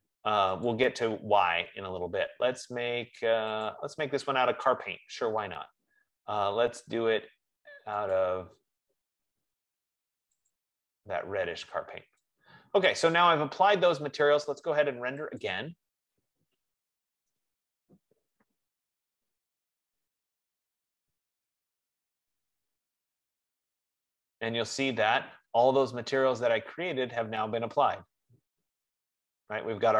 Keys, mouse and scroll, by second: 0.9-8.4 drag, 8.4 right click, 10.7 click, 13.6 click, 14.1 F15, 15.9 click.